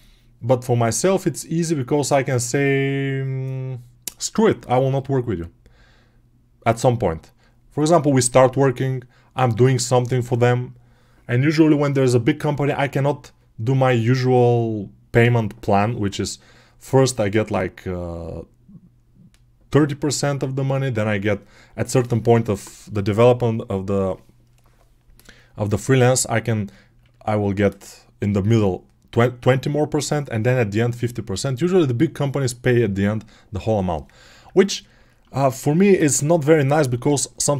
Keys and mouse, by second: 25.9-34.3 alt+drag, 34.3-35.3 alt+right drag, 35.3 alt+click, 35.9 ctrl+Tab, 37.0 alt+q, 37.4 1.